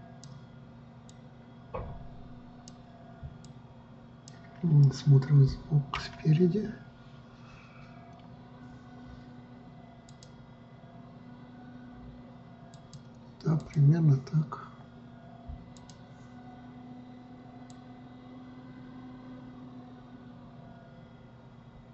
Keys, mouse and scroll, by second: 1.7-6.6 drag, 6.6 KP_1, 10.7 click, 13.3 click, 14.2 click, 16.3 click, 18.3-21.4 drag.